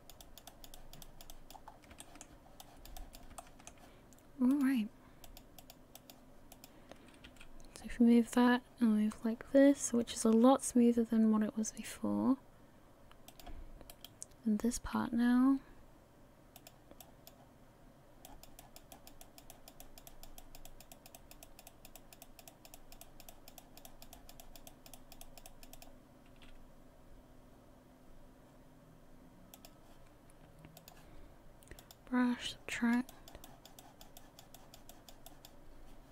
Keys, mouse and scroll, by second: 1.6 click, 1.7 scroll down 1, 2.0 shift+middle click, 2.6 click, 3.0 click, 3.4 shift+middle click, 4.5 click, 5.2 click, 5.9 click, 6.5 click, 7.3 r, 14.2 right click, 15.0 r, 17.0 click, 18.2 click, 18.9 click, 19.2 click, 19.8 click, 20.1 click, 20.7 click, 20.9-22.0 click, 22.5 click, 22.8 click, 23.3 click, 23.6-24.7 click, 25.2 click, 25.5 click, 26.3 r, 30.8 click, 31.8 click, 33.1 click, 33.4 click, 34.2 click, 35.3 click.